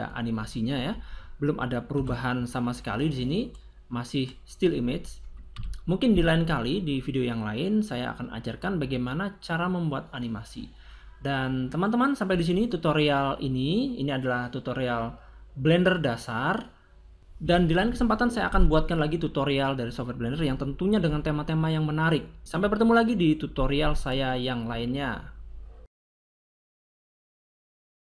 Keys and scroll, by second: 1.9 0, 5.4 a.